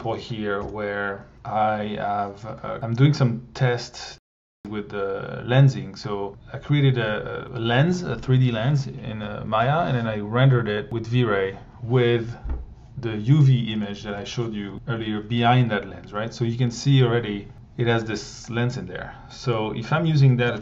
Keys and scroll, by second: 0.6 Delete, 1.3 r, 14.0 1, 20.5 Tab.